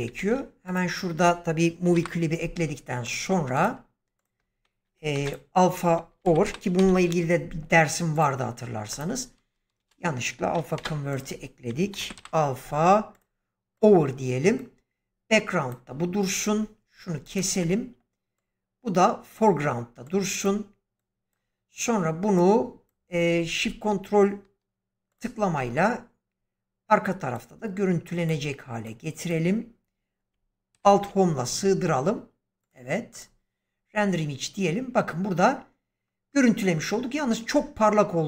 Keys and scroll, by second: 0.1 shift+a, 1.8 typing, 5.1-6.8 typing, 9.7 Delete, 10.7 shift+a, 11.8 typing, 30.6 alt+Home, 36.5 Escape.